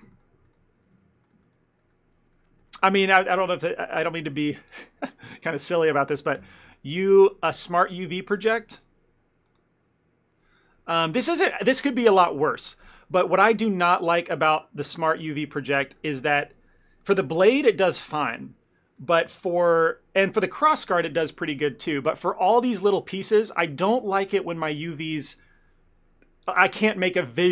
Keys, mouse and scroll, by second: 0.2 ctrl+middle click, 0.5 middle click, 0.8 a, 1.0 a, 1.3 shift+middle click, 1.5 ctrl+middle click, 2.4 middle click, 2.6 ctrl+middle click, 2.9 a.